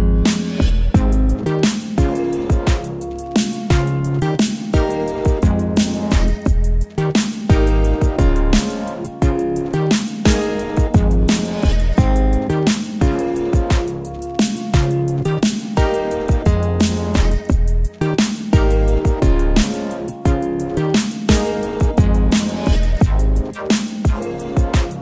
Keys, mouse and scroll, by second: 3.9 click, 8.1 click, 8.2 ctrl+d, 10.5-16.8 drag, 18.0 click, 21.1-25.0 drag.